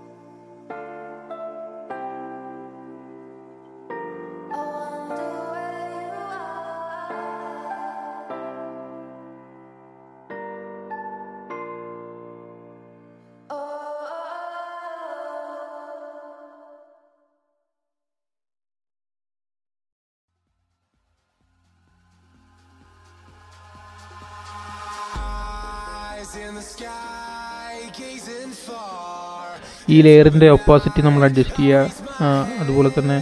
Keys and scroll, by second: 11.8 super+z, 12.0 super+z, 12.2 super+z, 12.4 super+z, 29.4 super+z, 29.6 super+z, 30.1 super+z, 30.3 super+z.